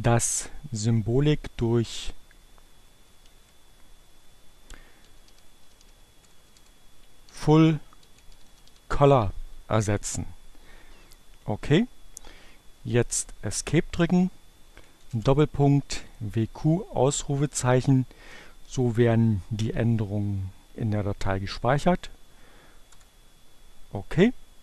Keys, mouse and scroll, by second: 1.8 Delete, 4.3-5.6 typing, 7.0-8.9 typing, 12.2 Escape, 14.7 shift+., 15.0 q, 17.3 shift+1, 22.4 Return.